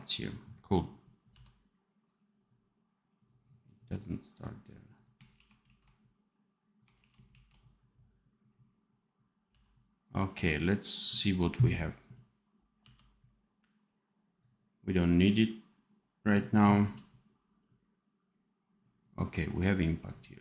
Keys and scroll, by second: 1.2 v, 5.2 shift+q, 5.5 shift+a, 6.9 shift+q, 7.2 shift+a, 9.4 v, 12.7 d.